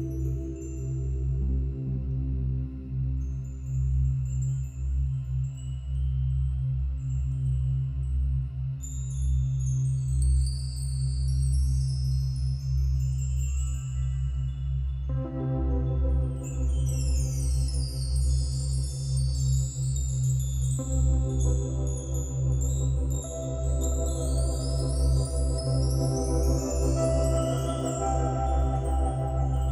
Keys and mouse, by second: 0.2 click, 0.6 click, 0.6 typing, 2.6 -, 2.8 -, 2.9 -, 4.4-5.2 typing, 6.2 click, 7.7 click, 8.4 click, 10.1 click, 10.3-12.7 drag, 10.3 typing, 15.1-20.7 drag, 21.7-24.6 drag, 25.0-25.5 typing, 26.6 click, 28.4 click, 28.8-29.5 typing.